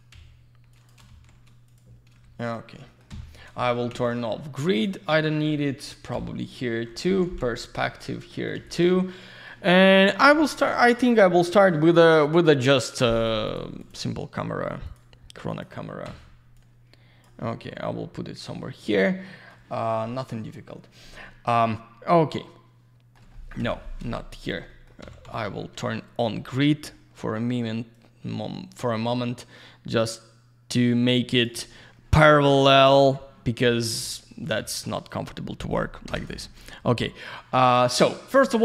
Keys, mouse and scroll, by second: 0.1 shift+f, 0.7 click, 1.1 shift+f, 1.7 click, 2.2 shift+f, 2.8 middle click, 3.9 z, 4.7 click, 5.3 middle click, 6.1 g, 6.8 middle click, 7.9 scroll down 1, 8.3 alt+middle click, 8.5 alt+z, 8.6 click, 8.9 alt+middle click, 10.8 click, 13.1 click, 13.4 click, 13.8 click, 13.9 double click, 14.8 click, 15.5 click, 16.5 click, 21.6 alt+middle click, 23.3 middle click, 23.6 Delete, 24.7 middle click, 25.8 alt+middle click, 27.0 scroll down 1, 27.9 click, 35.1 click, 36.0 Escape.